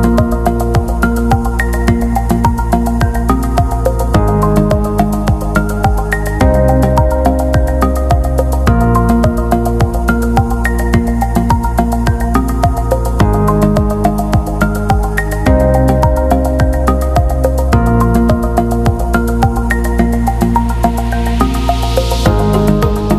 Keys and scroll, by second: 1.6 scroll, 1.8 ctrl+t, 15.1-16.0 typing.